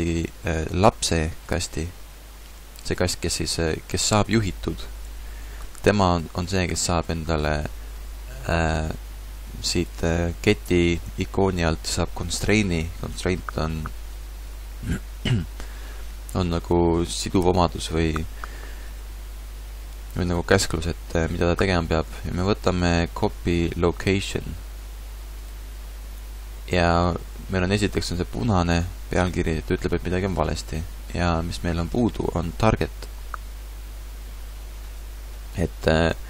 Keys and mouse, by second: 20.2-25.5 drag, 36.1-36.2 middle drag.